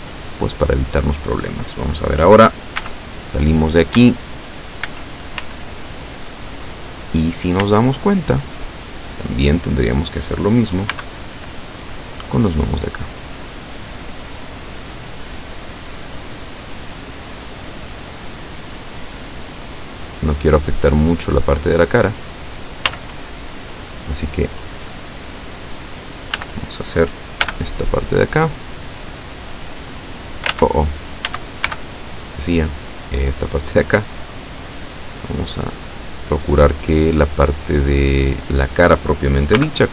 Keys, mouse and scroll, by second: 2.8 z, 4.0 z, 4.9 z, 7.6 a, 11.0 b, 11.4-12.5 drag, 13.2-14.2 drag, 14.2-14.6 scroll up 2, 14.6-15.2 scroll down 4, 15.8-16.2 scroll down 2, 16.4 scroll down 2, 17.0-17.9 scroll down 4, 18.6 scroll down 2, 19.0-19.4 scroll up 2, 20.1-20.5 scroll up 2, 22.9 z, 26.4 a, 27.5 b, 28.3-29.3 drag, 29.6-30.6 drag, 30.6 ctrl+z, 31.3 a, 31.7 b, 32.3-33.3 drag, 33.8-34.9 drag, 34.9-35.6 scroll up 2, 35.8-36.2 scroll up 1, 36.4-36.8 scroll up 1, 39.6 b.